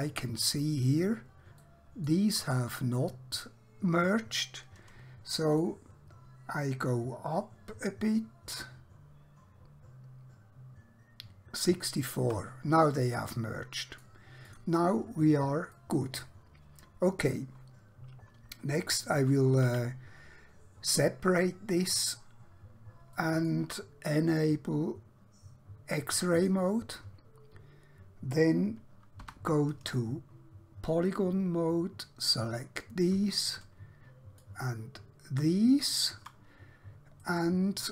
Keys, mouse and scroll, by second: 0.0 scroll up 1, 0.9 scroll down 1, 1.7 shift+middle click, 5.5 click, 7.0 shift+click, 13.1 middle click, 14.5 click, 15.7 middle click, 19.7 KP_3, 22.0 scroll down 1, 22.5-23.1 scroll up 1, 23.4 shift+middle click, 26.4 click, 29.1 3, 31.1 click, 34.5 shift+click, 37.3 right click.